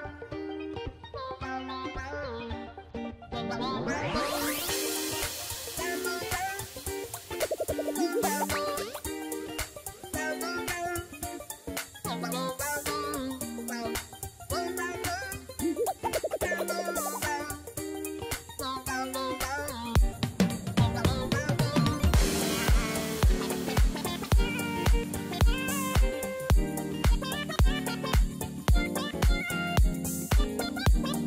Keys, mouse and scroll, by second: 7.9 double click, 23.9 right click.